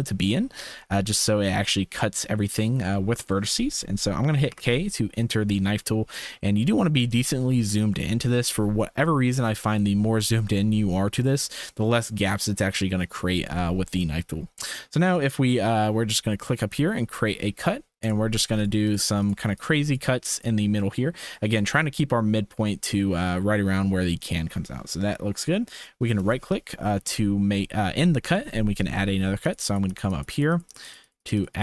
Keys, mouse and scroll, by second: 4.5 k, 8.0 shift+middle click.